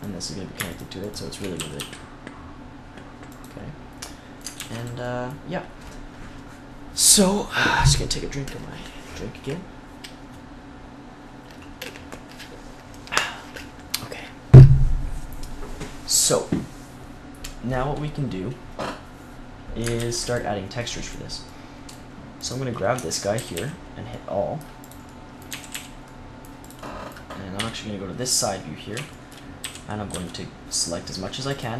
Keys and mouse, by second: 1.5 r, 4.4 ctrl+s, 17.9-19.9 middle drag, 19.9 ctrl+s, 20.7-22.3 middle drag, 22.3 click, 22.8 Tab, 23.2 a, 23.4 a, 25.4 a, 25.6 a, 27.4 KP_3, 29.5 a, 30.0 c.